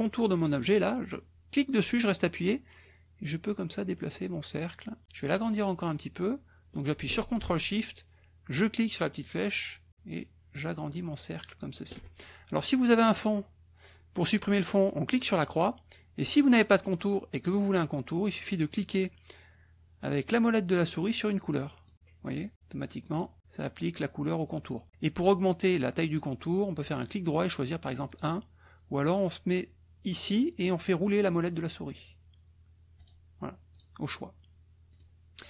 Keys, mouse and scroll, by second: 1.5-5.0 drag, 9.1-11.8 ctrl+shift+drag, 13.1 click, 15.2 click, 21.3 middle click, 22.4 middle click, 23.0 middle click, 26.8 right click, 28.0 click, 30.6-31.6 scroll down 4, 32.0-32.5 scroll down 2, 33.0 right click, 33.7 click, 35.0 click.